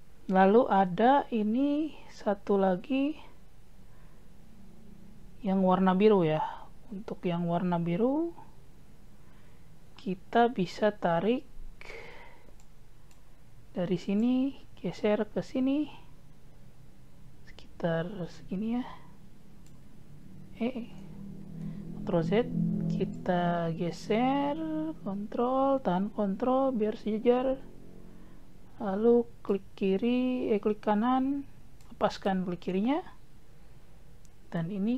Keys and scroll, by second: 21.6 ctrl+z.